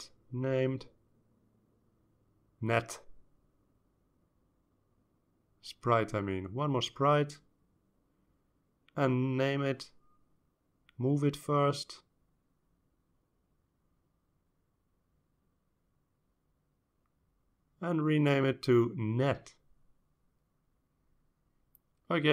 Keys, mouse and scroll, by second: 1.7 click, 3.1-4.4 typing, 5.6 BackSpace, 5.8 BackSpace, 6.4 shift+s, 7.5 p, 7.8 r, 10.3 click, 12.1-13.6 drag, 14.1-15.1 drag, 15.3-16.6 drag, 17.0-18.8 drag, 19.3 click, 20.5-21.8 typing, 22.2 Return.